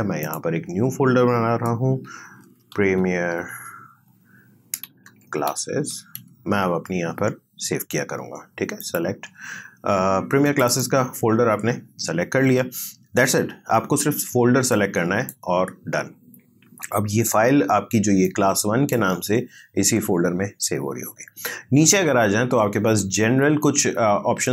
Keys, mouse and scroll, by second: 1.8-6.7 typing, 8.8 click, 14.7-17.7 drag, 18.2-24.5 drag.